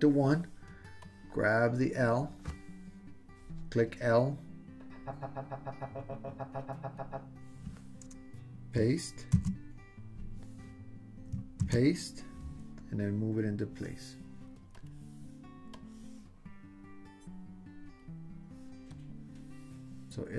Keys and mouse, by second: 1.0-3.3 drag, 3.3 l, 4.7 super+c, 4.7 super+v, 4.7 super+z, 4.7-7.2 drag, 9.3 super+v, 11.6 super+v, 14.8 click, 15.9-18.0 drag, 18.9 click.